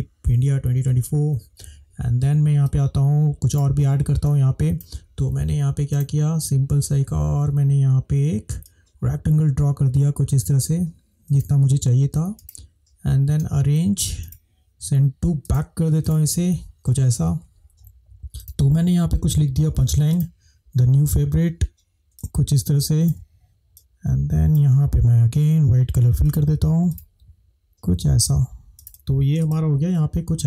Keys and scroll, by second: 2.9 space, 17.6 e, 29.6 space.